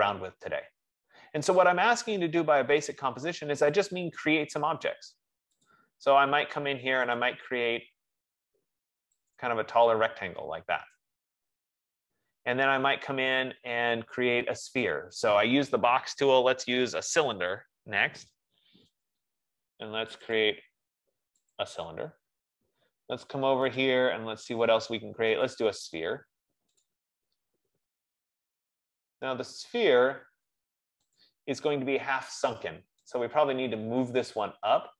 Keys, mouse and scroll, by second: 4.1 F15, 4.1 click, 6.0 click, 7.5 click, 9.5 click, 11.1 right click, 11.8-12.4 scroll, 13.2-13.6 scroll, 13.8-14.6 scroll, 17.7 click, 19.4 click, 20.7 click, 21.9 click, 24.1 click, 27.1 click, 31.5 click, 33.4 click.